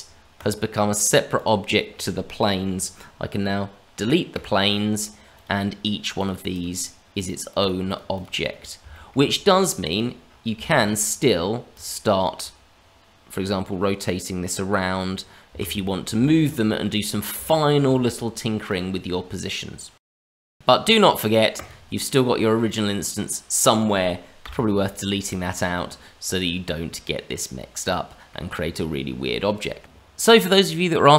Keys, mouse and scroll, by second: 0.3 click, 1.3 click, 3.6-4.3 scroll down 2, 4.3 Delete, 4.9-5.3 scroll up 1, 5.3 click, 5.8 middle click, 6.1 click, 6.5 click, 6.8-7.5 scroll down 2, 7.1 click, 7.5 click, 7.8 click, 8.1 click, 8.3 click, 8.9 shift+middle click, 9.8 click, 10.2 scroll up 1, 10.6 shift+middle click, 10.9-11.7 scroll up 2, 11.7 click, 13.4 r, 15.8 scroll down 1, 16.2 shift+middle click, 16.9 middle click, 17.4 shift+middle click, 18.1-18.6 scroll down 2, 18.6 click, 19.0-20.0 scroll up 1, 20.0 scroll down 1, 20.1 middle click, 21.5 click, 22.6 middle click, 24.4 Delete, 25.2 click, 25.7 middle click, 29.9-30.7 scroll down 2, 30.8 shift+middle click.